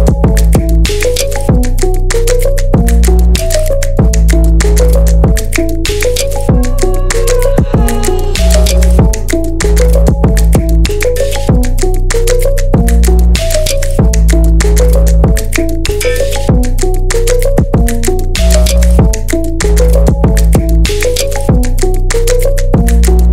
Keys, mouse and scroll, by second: 4.7 scroll down 1, 5.9-11.2 drag, 16.1-19.3 drag, 21.4-23.3 drag.